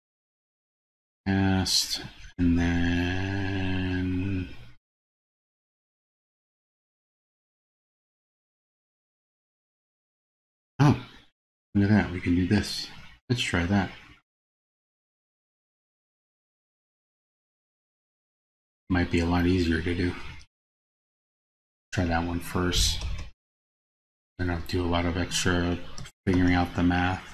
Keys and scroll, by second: 20.6 super+c, 21.6 super+c, 23.7 super+v.